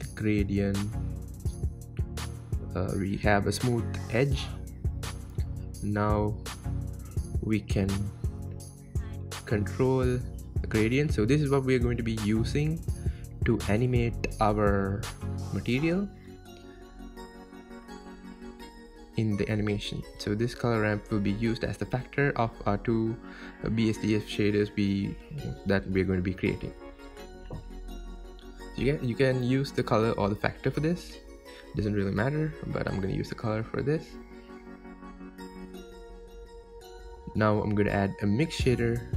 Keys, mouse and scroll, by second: 0.3-0.7 scroll up 5, 5.5-9.2 drag, 9.2-9.6 scroll down 4, 10.7-17.0 drag, 20.1 scroll down 2, 20.6-21.7 middle drag, 21.7-22.2 scroll up 2, 22.2-22.9 scroll down 3, 22.9-24.5 middle drag, 24.5-31.6 drag, 34.3 click, 34.8 click.